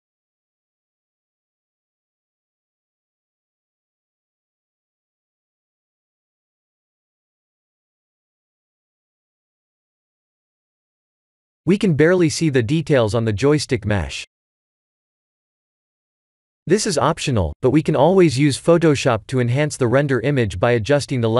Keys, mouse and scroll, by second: 7.6 click, 8.1 ctrl+s.